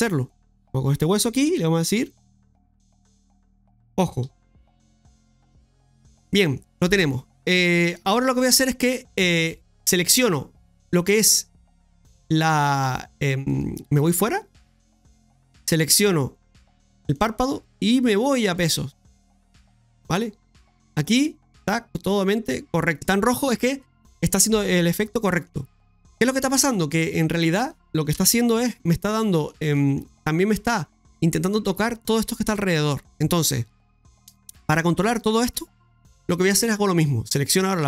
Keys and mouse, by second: 1.1 click, 3.0-5.5 drag, 6.3 middle click, 7.2 middle click, 11.6 right click, 12.1 right click, 12.8 right click, 13.5 right click, 14.6 click, 15.9 right click, 17.1-19.6 drag, 20.8-22.9 middle drag, 25.2 middle click, 26.5 click, 28.1 KP_Divide, 29.2 middle click, 29.7 shift+middle click, 33.4 middle click, 34.5 middle click, 35.9-37.0 middle drag, 37.6 right click.